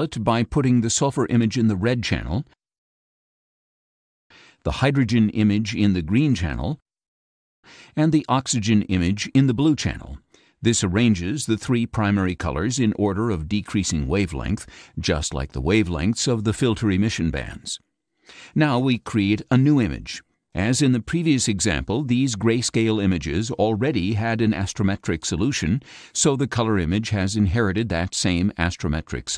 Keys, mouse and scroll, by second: 0.0-2.9 drag, 4.6-6.3 drag, 8.1-10.3 drag, 20.0 click, 24.0-29.0 drag.